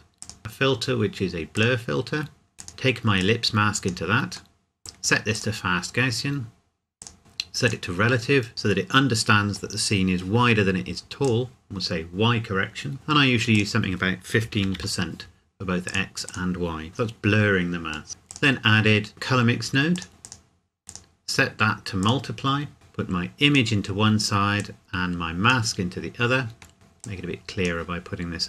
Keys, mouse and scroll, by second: 0.2 click, 1.5 click, 4.6 middle click, 5.3 click, 11.2 click, 13.5 click, 14.4 KP_1, 14.6 KP_5, 15.9 click, 16.9 KP_Enter, 18.1 middle click, 18.3 click, 19.9 click, 26.7 scroll down 1, 27.0 click.